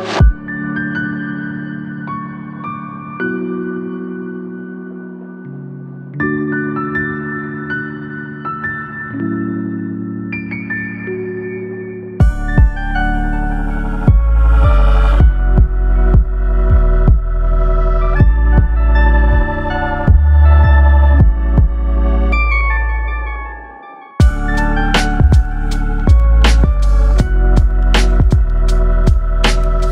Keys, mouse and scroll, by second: 1.5 shift+f, 4.4 click, 5.9 click, 8.4 ctrl+z, 8.8 ctrl+z, 10.2 ctrl+z, 17.2-19.5 scroll down 1, 19.5 click, 24.1 click, 25.2 scroll down 3, 25.5 middle click, 27.0 scroll up 2, 29.1 click.